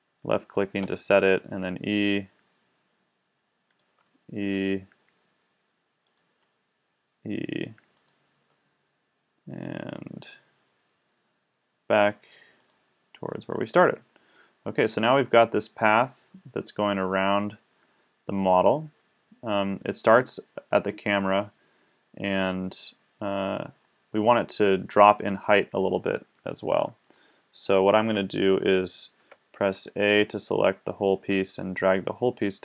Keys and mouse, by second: 0.9 e, 3.8 click, 4.0 e, 5.7 click, 6.3 e, 8.5 e, 12.7-15.7 middle drag, 15.9-18.5 middle drag, 29.2 a, 29.8 a, 31.5-32.6 drag.